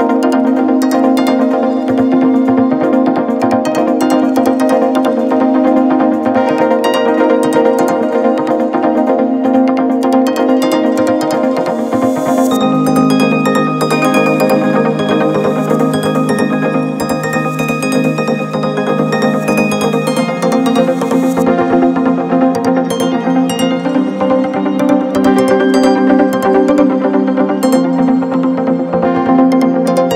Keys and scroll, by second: 0.0 c, 0.7 m, 4.9 0, 5.8 0, 6.1 0, 21.8 Up, 22.2 Up, 22.4 Up, 22.6 Up, 23.9 Up.